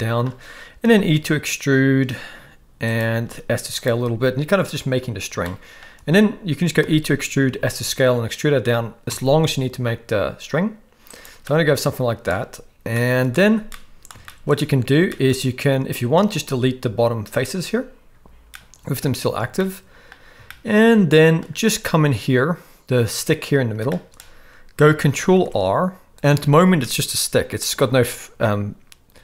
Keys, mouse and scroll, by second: 0.0 shift+middle click, 0.8 e, 3.2 s, 5.5 shift+middle click, 6.8 e, 11.4 middle click, 13.0 shift+middle click, 13.7 middle click, 14.2 shift+middle click, 15.1 shift+middle click, 16.5 x, 18.5 middle click, 19.6 shift+middle click, 20.5-21.4 shift+middle drag, 23.9-24.2 shift+middle drag, 25.3 ctrl+r.